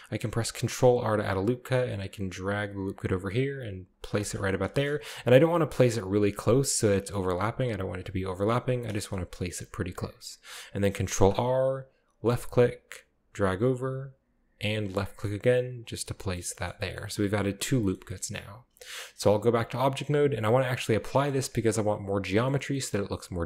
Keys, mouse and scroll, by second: 0.5 ctrl+r, 1.9-3.0 drag, 4.2 click, 4.7 shift+middle click, 4.9-6.0 shift+scroll up 1, 5.3 g, 5.4 g, 6.7 right click, 7.4 g, 7.5 g, 7.9 click, 8.2-8.9 scroll down 1, 8.3 click, 8.9-10.2 shift+scroll down 1, 9.0-10.2 shift+middle drag, 11.1 ctrl+r, 12.3 click, 15.0 click, 15.9 scroll down 2, 16.0-17.0 middle drag, 16.8 scroll up 2, 17.0 middle click, 17.2 scroll down 2, 17.7-18.2 scroll down 1, 17.8 shift+middle drag, 18.2-19.4 middle drag, 19.4 Tab, 21.1-22.2 middle drag, 21.3-22.2 scroll up 2, 22.3-22.9 middle drag.